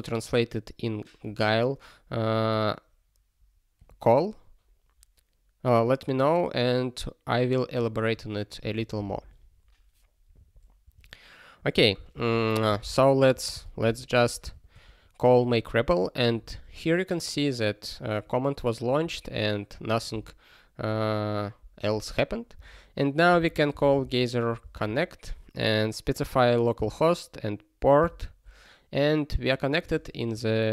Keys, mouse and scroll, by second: 22.5 super+o, 23.4 alt+x, 24.7 Return.